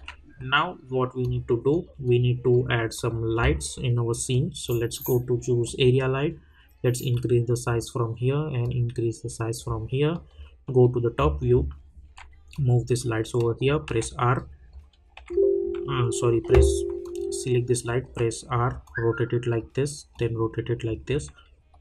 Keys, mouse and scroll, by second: 1.2-10.1 drag, 10.1 middle click, 11.1 scroll down 1, 12.5-13.8 drag, 13.8 t, 14.3 click.